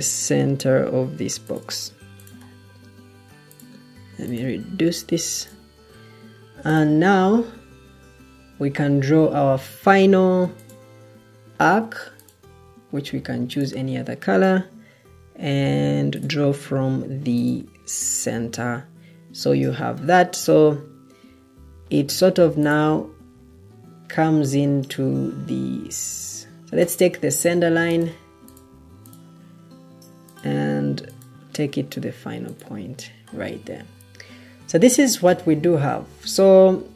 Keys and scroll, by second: 6.9 Escape.